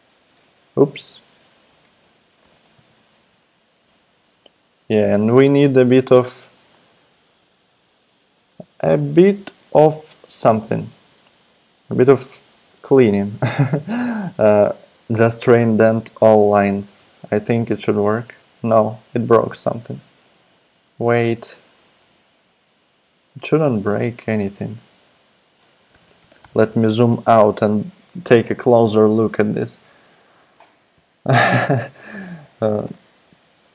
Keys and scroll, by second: 0.2 BackSpace, 0.3 BackSpace, 1.3 shift+0, 1.7 Up, 2.0 Up, 2.4 Return, 2.5 Return, 2.7 super+v, 5.1 super+a, 19.5 super+z, 25.9 super+-, 26.0 super+-, 26.2 super+-, 26.4 super+-.